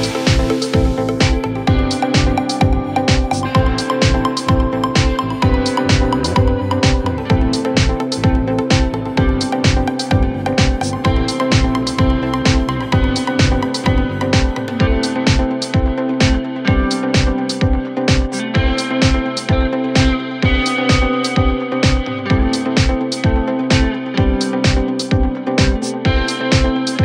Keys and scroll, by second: 6.2 Delete, 7.5 ctrl+z, 10.2 Delete, 12.9 c.